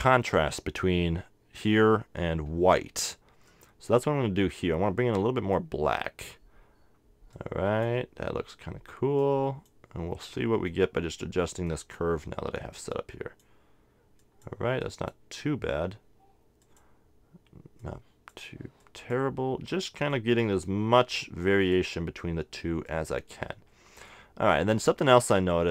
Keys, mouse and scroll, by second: 3.5-7.0 drag, 7.3-25.7 drag.